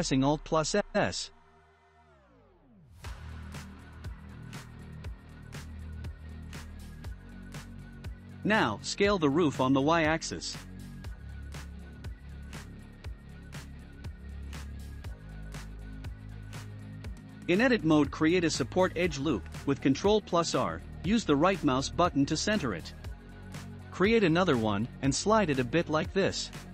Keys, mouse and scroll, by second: 3.6-4.6 shift+middle drag, 4.6 Tab, 5.1-10.0 middle drag, 12.3-15.3 shift+middle drag, 15.3 Tab, 16.9 shift+middle click, 17.8 ctrl+r, 21.0 ctrl+r, 25.4-26.7 shift+middle drag.